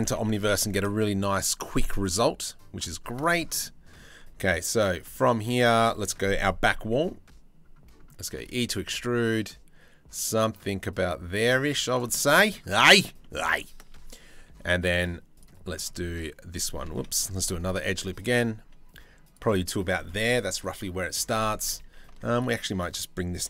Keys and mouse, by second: 0.5-2.8 shift+middle drag, 3.2 click, 4.8 click, 5.2 click, 7.8 e, 11.7 shift+middle click, 11.9 click, 12.8 click, 13.6 ctrl+r, 16.6 ctrl+z, 17.3 ctrl+r.